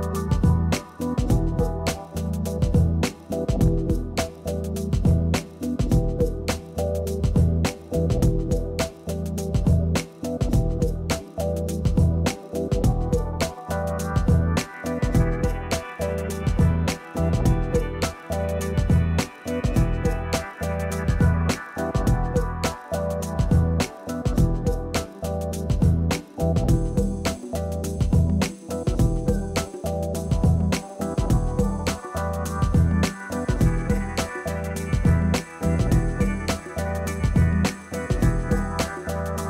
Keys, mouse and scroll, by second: 0.1 middle click, 1.3 right click, 1.5-1.8 scroll down 1, 2.8 click, 3.5 click, 4.6 click, 8.4 click, 10.4 click, 10.4 click, 12.0 scroll up 1, 12.1 scroll down 1, 12.2 middle click, 12.7 click, 13.1 right click, 13.4 right click, 13.5 scroll up 1, 13.8-15.1 middle drag, 15.6 ctrl+middle click, 15.9 scroll up 1, 17.0 middle click, 18.5 click, 19.1 click, 19.7 right click, 20.2 scroll down 1, 21.2-22.2 drag, 22.4 click, 23.2 click, 25.2 scroll down 1, 25.4 click, 25.8 middle click, 26.4 scroll up 1, 27.9 scroll down 1, 28.0 click, 28.5 click, 28.5 right click, 29.0 middle click, 29.3 right click, 29.5 scroll down 1, 29.8 click, 31.0 scroll up 1, 31.3 middle click, 32.2 scroll up 1, 32.5 ctrl+middle click, 33.0 click, 34.2 click, 34.7 scroll down 1, 34.8 middle click, 35.4 click, 36.5 scroll down 1, 36.8 space, 37.0 click, 37.1 scroll down 1, 37.7 middle click, 38.0-38.4 scroll up 1, 38.4-38.8 scroll down 1, 38.8 click, 39.0 click.